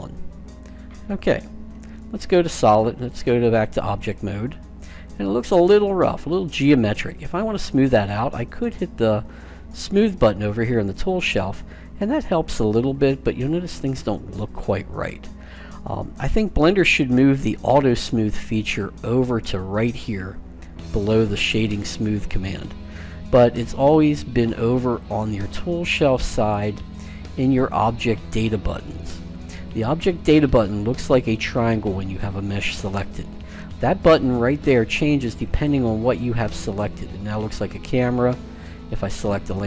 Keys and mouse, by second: 4.1 click, 4.7-6.8 middle drag, 10.9-12.0 drag, 12.0-14.1 middle drag, 24.9-26.7 drag, 35.4-37.2 right drag, 37.5-38.9 middle drag, 38.9-39.6 right drag.